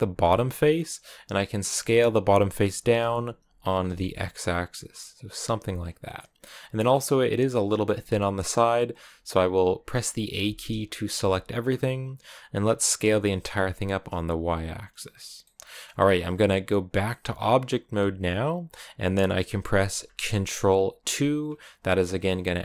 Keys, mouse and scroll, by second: 0.0 right click, 0.3-1.7 middle drag, 1.7 s, 6.0-8.8 middle drag, 8.8 a, 10.2 a, 10.7-12.4 shift+middle drag, 12.4 s, 15.2-17.8 middle drag, 17.8 Tab, 19.0 scroll up 1, 20.8 ctrl+2, 22.4-22.6 middle drag.